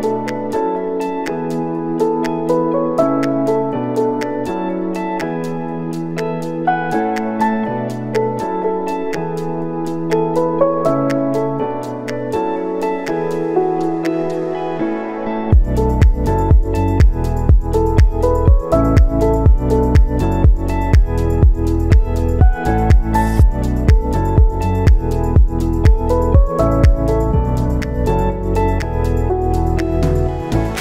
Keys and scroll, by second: 6.1-7.0 typing, 8.3 KP_Subtract, 8.5 5, 8.7 Return, 12.7 ctrl+v, 13.5 ctrl+v.